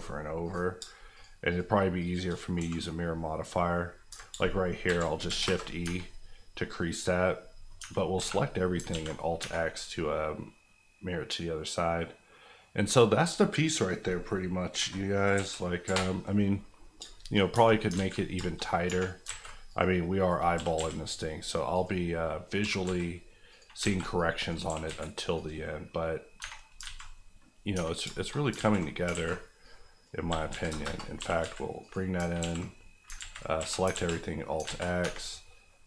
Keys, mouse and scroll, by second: 0.0 ctrl+click, 0.7 click, 0.7 shift+click, 1.5 shift+click, 2.5 q, 4.3 shift+q, 4.8 shift+e, 5.2 KP_1, 5.4 KP_Enter, 5.8 Tab, 6.3 scroll down 1, 6.6 middle click, 7.8 Tab, 8.2 a, 8.7 alt+a, 9.0 x, 9.4 Tab, 9.6 middle click, 14.7 KP_0, 15.3 KP_1, 15.8 KP_Decimal, 16.6-17.4 scroll up 4, 17.1 shift+middle click, 17.5 Tab, 17.9 alt+z, 18.4 shift+middle click, 18.6 scroll up 1, 18.8 1, 19.2 alt+a, 19.7 click, 20.5 g, 20.7 x, 21.7 click, 22.1 scroll down 1, 22.3 scroll up 1, 22.6 g, 22.8 z, 23.5 click, 23.8 alt+a, 24.1 click, 24.6 g, 24.8 z, 25.3 click, 25.7 scroll down 1, 26.0-26.4 scroll up 1, 26.4 Tab, 26.4-27.1 scroll down 4, 26.8 alt+z, 27.3-28.5 scroll up 4, 27.7 Tab, 28.1 shift+middle click, 28.5 alt+z, 29.1 alt+a, 29.6 click, 30.3-31.4 typing, 30.8 KP_Enter, 31.8 click, 32.4 alt+x, 33.5 z, 33.6 a, 33.9 alt+x, 34.4 scroll down 1, 34.6 alt+z, 35.0 Tab, 35.1 scroll down 2, 35.7-35.8 middle drag.